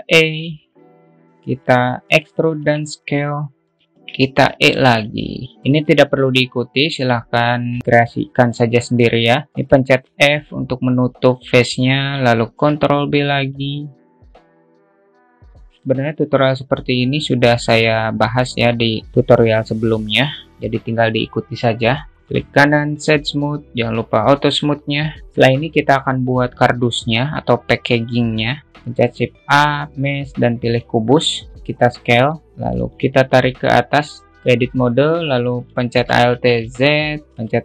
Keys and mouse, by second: 0.0 e, 2.5 e, 4.4 e, 6.3 middle click, 7.3 click, 7.7-10.0 alt+middle drag, 10.0 f, 10.6-12.8 shift+middle drag, 13.0 ctrl+b, 16.3 Tab, 16.3 click, 17.9-22.1 shift+middle drag, 22.7 right click, 23.7 q, 25.2 alt+middle click, 27.1 drag, 28.4 click, 28.8 shift+a, 31.6 s, 32.4 click, 34.1 Tab, 34.3 Tab, 36.3 middle click, 36.6 alt+z.